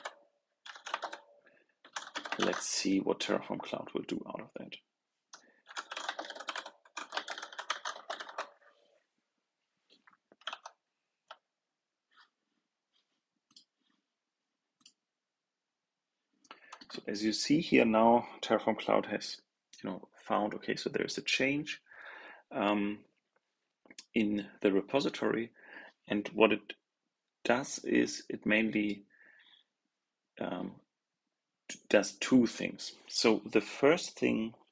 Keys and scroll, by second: 10.4 super+End.